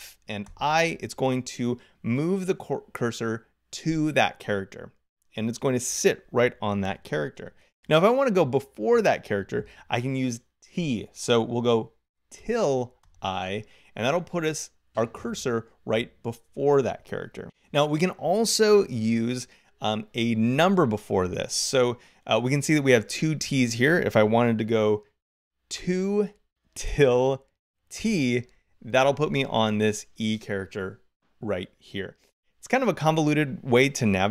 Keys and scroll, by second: 0.3 i, 7.2 0, 12.2 t, 12.8 i, 25.6 2, 26.7 t.